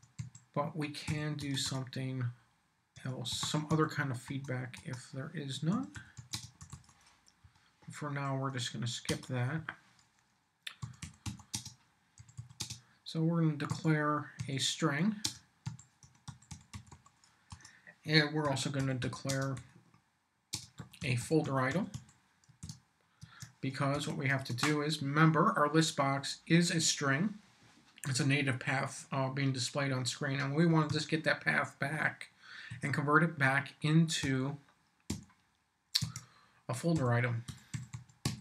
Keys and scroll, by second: 0.0-1.0 typing, 1.4 Return, 2.7-4.2 typing, 4.2 Return, 5.5-7.2 typing, 7.4 Up, 9.1 Return, 9.5 Up, 10.6-12.6 typing, 13.7-23.1 typing, 17.5 Return, 23.2 shift+Tab, 23.9 Return, 30.7 s, 32.7 =, 34.2 l, 35.1 b, 36.0 Tab, 36.9-38.4 typing.